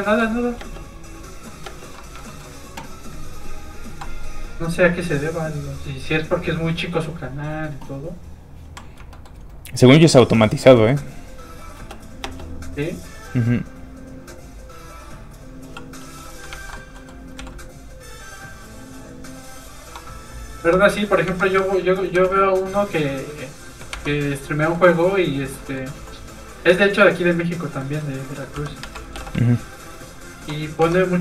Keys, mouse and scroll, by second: 0.0 shift+middle click, 0.2 scroll up 1, 0.5 space, 1.4 middle click, 1.6 space, 1.9 middle click, 2.1 shift+middle click, 3.3 shift+click, 3.4 click, 3.9 x, 4.5 click, 5.0 g, 5.8 click, 9.1 shift+middle click, 10.4 middle click, 10.5 middle click, 10.7 shift+middle click, 11.7 shift+space, 14.4 click, 16.0 middle click, 16.5 ctrl+Tab, 17.0 middle click, 17.3 z, 20.6 z, 21.2 Tab, 21.5 a, 22.0 g, 22.1 z, 23.9 Tab, 23.9 click, 24.4 middle click, 24.7 scroll up 1, 25.1 middle click, 25.6 shift+middle click, 26.7 middle click, 26.8 middle click, 28.5 Tab, 28.8 a, 29.0 g, 29.1 z, 30.2 shift+click, 30.8 click.